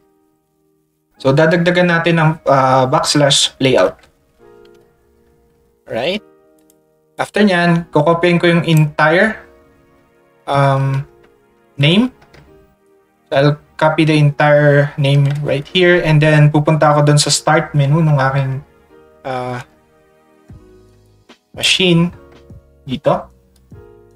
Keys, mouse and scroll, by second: 4.8 ctrl+a, 6.6 click, 7.1-8.7 drag, 10.9 ctrl+c, 21.0 ctrl+shift+click, 23.5 ctrl+shift+click.